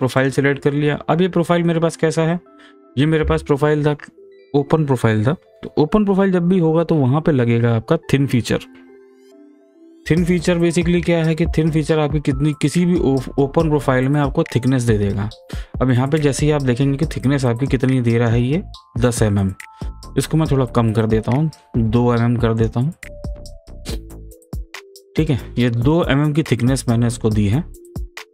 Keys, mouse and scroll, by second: 0.8 click, 17.7-20.5 drag, 22.6 click, 23.6-25.8 middle drag, 25.8-26.1 scroll up 1, 26.4-28.3 scroll down 1.